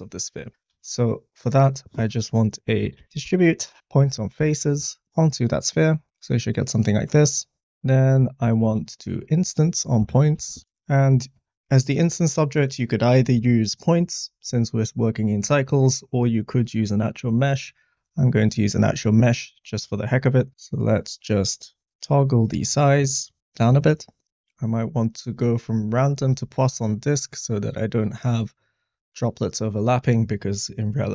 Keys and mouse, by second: 0.7 shift+a, 3.8 BackSpace, 5.1-7.1 middle drag, 7.6 click, 8.6 shift+a, 11.0 click, 12.1-18.3 drag, 20.5-22.5 drag, 23.1-23.5 middle drag, 24.6-25.9 drag, 27.2 middle click.